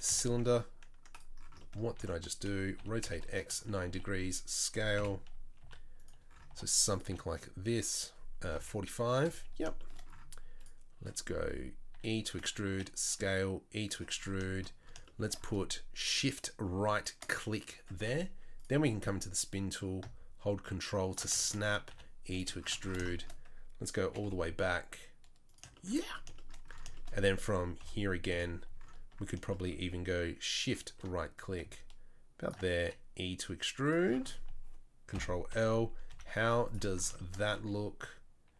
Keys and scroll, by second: 1.9 ctrl+z, 2.8 r, 3.8 s, 4.9 KP_7, 5.6 s, 6.5 g, 7.0 r, 11.9 e, 12.6 s, 13.2 e, 21.9 e, 24.0 g, 27.8 KP_1, 28.3 KP_7, 32.8 e, 35.1 ctrl+l, 35.5 KP_2, 35.5 KP_3, 36.1 z.